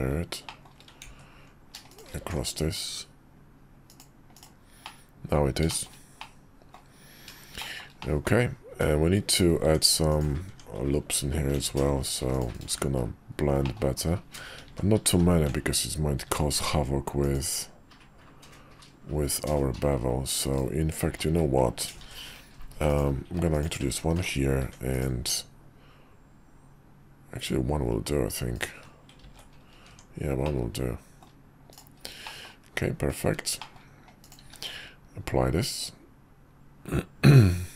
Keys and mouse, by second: 0.5 click, 1.1 ctrl+z, 1.9 click, 2.2 alt+x, 3.9 click, 4.3-4.8 drag, 4.8-5.3 middle drag, 5.7 shift+middle drag, 6.2-6.8 middle drag, 7.6 shift+middle drag, 8.0 middle click, 8.7 Tab, 9.6 Tab, 10.1 click, 10.5 Tab, 11.5 ctrl+r, 12.6 Tab, 13.6 middle click, 14.7 ctrl+z, 15.1 ctrl+z, 16.3 ctrl+r, 21.1 ctrl+z, 22.0 ctrl+r, 24.6 ctrl+r, 29.2 ctrl+z, 29.9 Tab, 30.4-31.2 middle drag, 32.2 middle drag, 33.6 middle drag, 34.4 q.